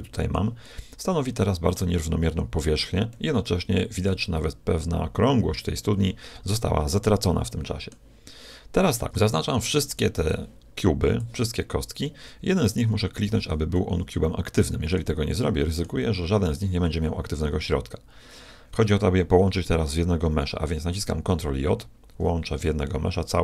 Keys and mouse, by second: 6.4-8.4 middle drag, 9.1 a, 9.9 b, 12.7-13.7 shift+right drag, 13.7 middle click, 16.9 click, 21.6 ctrl+j, 23.3-23.4 middle drag.